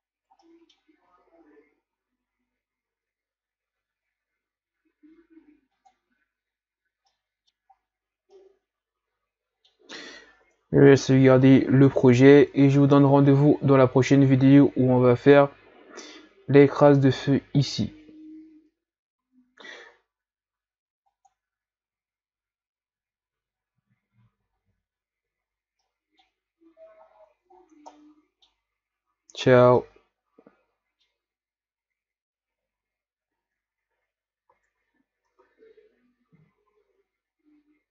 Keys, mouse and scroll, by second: 0.4-0.9 middle drag, 0.9 a, 1.3-1.6 scroll up 5, 3.8 ctrl+s, 6.7 click, 7.2-7.5 middle drag, 7.8-8.4 scroll up 5, 8.4-11.1 middle drag, 11.1-11.9 scroll down 3, 11.9-12.3 scroll up 3, 19.9-21.3 scroll down 1, 21.4 click, 25.5-25.9 scroll down 3, 25.9-27.1 middle drag, 27.1-27.6 scroll up 3, 27.6-28.0 scroll down 4, 28.0-32.9 middle drag, 34.8 ctrl+s, 36.4 ctrl+s.